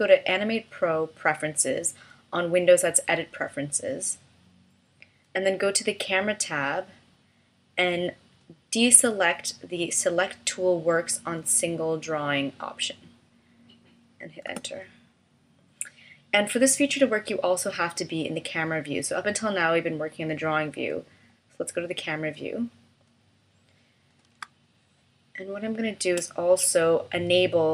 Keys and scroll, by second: 14.5 Return, 24.4 space.